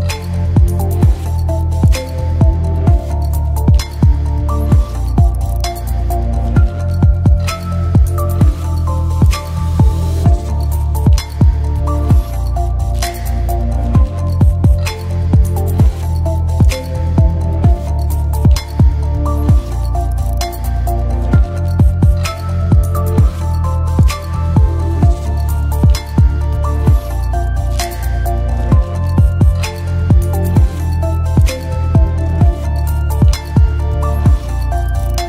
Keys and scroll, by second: 17.2 space, 26.3-28.0 typing, 29.3 space, 34.4-35.2 typing.